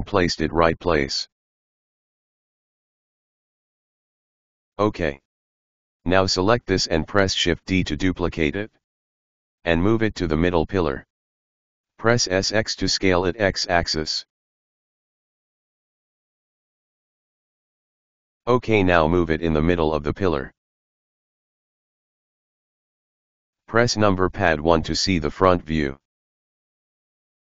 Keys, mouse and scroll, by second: 4.6 right click, 6.0 shift+d, 11.5 s, 17.8 KP_Decimal, 18.2 KP_1, 18.4-19.9 middle drag, 20.5 g, 22.6-24.1 middle drag, 24.1 KP_1, 25.2-25.9 scroll down 1, 26.5 right click, 27.2 right click.